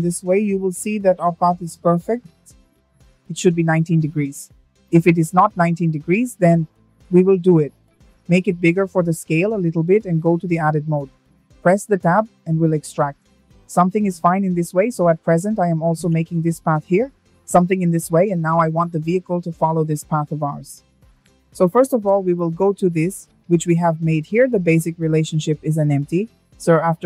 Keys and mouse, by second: 0.8-2.2 drag, 5.4 s, 6.2 click, 7.3 Tab, 7.7 click, 9.2 e, 9.9 click, 10.2 e, 10.6 click, 11.7 e, 11.9 click, 12.2 e, 12.5 click, 12.8 e, 13.6 click, 14.5 Tab, 24.4 click, 25.2-27.0 drag.